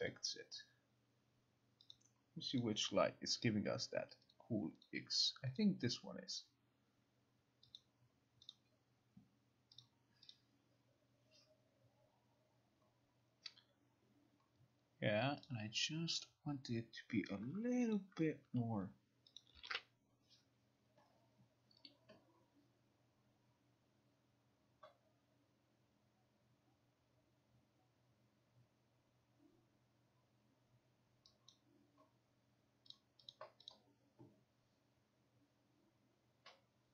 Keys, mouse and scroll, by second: 0.2 click, 2.1 click, 2.7 click, 4.4 click, 5.0 click, 5.7 click, 7.9 click, 8.6 click, 9.9 click, 10.4 click, 15.6 click, 16.4 click, 18.0 click, 19.4 click, 19.7 ctrl+r, 31.6 click, 33.0 click, 33.4 click, 33.8 click.